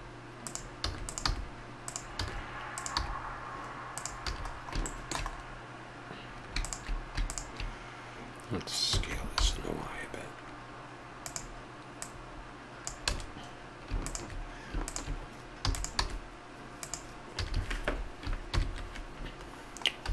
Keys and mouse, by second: 0.8 a, 0.9 click, 1.2 g, 2.2 a, 2.7 click, 2.9 g, 4.3 a, 8.8 s, 11.9 click, 12.7 click, 13.1 a, 13.6 click, 15.4 click, 15.6 e, 15.9 s, 17.3 a, 17.5 a, 18.5 ctrl+n, 20.0 a.